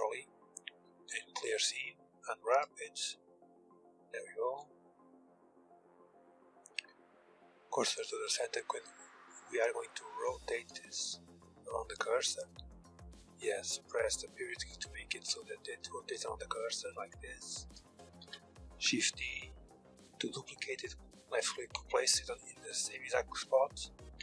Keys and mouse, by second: 0.5 ctrl+e, 1.2 a, 1.5 a, 2.3 u, 4.2 KP_1, 6.2 shift+s, 8.0 middle click, 9.8 shift+s, 12.0 ., 12.4 ,, 12.8 ., 16.4 r, 16.9 ctrl+z, 17.8 shift+d, 23.6 r.